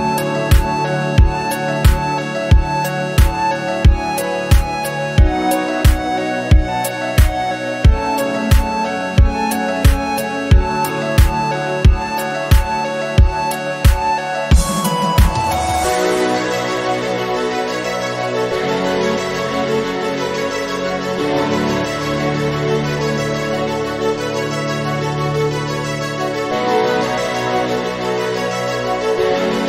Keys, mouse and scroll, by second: 0.6 scroll down 1, 0.8-2.0 shift+middle drag, 2.4 click, 2.7-5.7 drag, 4.2 KP_Decimal, 4.3 KP_8, 4.5 KP_5, 6.0-6.4 scroll down 1, 6.4-6.7 scroll up 3, 6.7 click, 8.3 click, 13.0 KP_7, 13.2 scroll up 3, 13.4 shift+middle click, 14.0-15.2 drag, 15.2 g, 15.7 scroll down 2, 15.9 g, 18.1-18.5 scroll up 2, 18.5 shift+middle click, 21.9 click, 26.3-26.9 scroll down 3, 26.9 Home, 28.1 click.